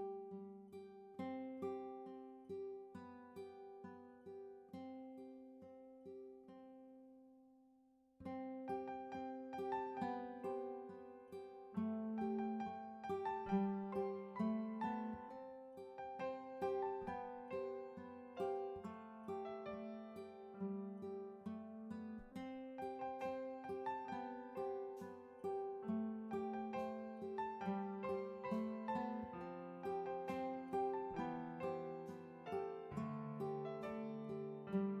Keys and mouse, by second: 1.3 click, 2.2 double click, 2.3 click, 2.5 double click, 2.5 click, 2.7 double click, 2.8 click, 3.0 double click, 3.1 click, 3.2 double click, 3.3 click, 3.5 double click, 3.6 click, 3.8 double click, 3.8 click, 4.1 double click, 4.2 double click, 5.5 double click, 5.6 click, 5.7 double click, 5.8 click, 6.0 double click, 6.1 click, 6.3 double click, 6.3 click, 6.5 double click, 6.6 click, 6.8 double click, 6.9 click, 7.1 double click, 7.2 click, 11.7 BackSpace, 13.4 BackSpace, 15.4-16.4 typing, 19.0 click, 19.6-20.2 typing, 21.3 BackSpace, 21.5 BackSpace, 23.7 click, 24.3-25.6 typing, 27.1 click, 31.3 click, 33.2 click, 34.9 click.